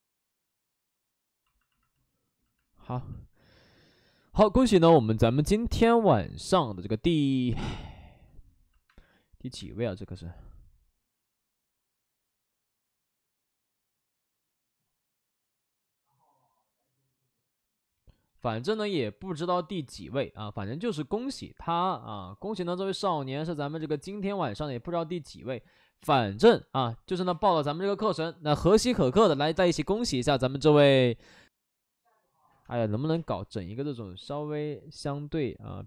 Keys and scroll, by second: 8.9 space, 9.5 space, 19.9 w, 27.2 2, 32.6 space, 33.0 1, 33.1 space, 34.1 ctrl+z.